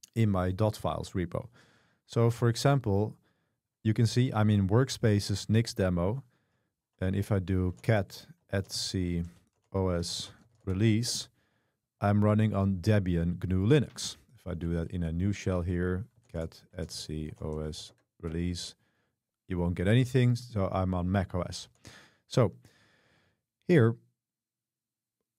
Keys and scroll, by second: 6.9-11.1 typing, 14.6 ctrl+b, 16.0-18.3 typing, 21.3 ctrl+c, 21.7 ctrl+d.